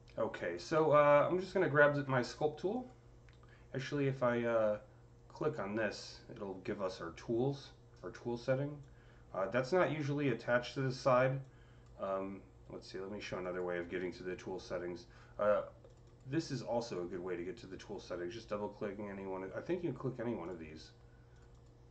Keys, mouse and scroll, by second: 0.6 alt+middle click, 3.7-5.2 alt+drag, 4.4 typing, 5.2 click, 8.6 click, 8.6 c, 8.7-15.7 drag, 11.6 typing, 15.7-18.3 drag, 18.0 typing, 20.3 click, 20.4 typing, 21.2 click, 21.4 double click.